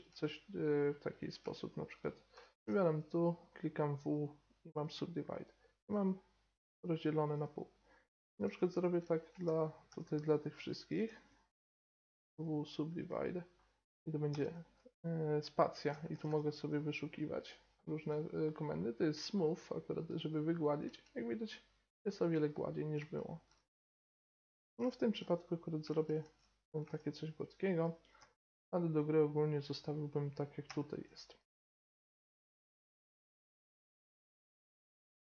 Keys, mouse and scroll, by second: 2.6 w, 5.3-7.2 right drag, 5.9 g, 8.7 a, 9.4 ctrl+z, 9.9 ctrl+z, 10.5-12.4 drag, 10.9 b, 12.0 w, 14.3 space, 16.2 o, 20.8 Tab, 22.3-24.5 middle drag, 26.2 Tab, 27.4-29.3 drag, 28.1 b, 31.3-35.3 typing, 31.6 ctrl+z, 32.0 ctrl+z, 32.1 ctrl+z, 32.5 ctrl+z, 33.1-33.5 ctrl+z, 33.6 right click, 34.4 right click, 35.0 right click.